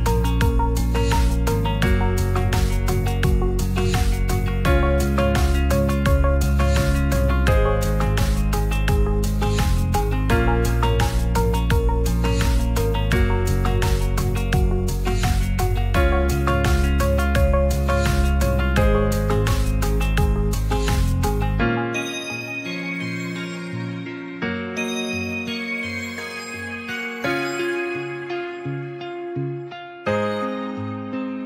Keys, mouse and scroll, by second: 0.1 click, 1.5 ctrl+a, 1.9 middle click, 2.3 Tab, 3.1 middle click, 4.0 s, 4.2 x, 5.1 click, 6.5 Tab, 8.8 g, 9.9 middle drag, 10.4 Tab, 11.1 click, 11.7 Tab, 12.0 Tab, 12.2 middle click, 12.6 2, 13.7 click, 15.4 Tab, 16.7 click, 18.1 middle drag, 19.3 Tab, 19.9 Tab, 20.4 drag, 21.0 shift+click, 22.2 Tab, 22.7 Tab, 23.0 ctrl+a, 23.5 shift+middle click, 24.1-25.4 drag, 27.1 click, 27.4 click, 27.6-28.7 drag, 28.7 middle click, 29.3 shift+middle drag, 30.7-31.4 drag.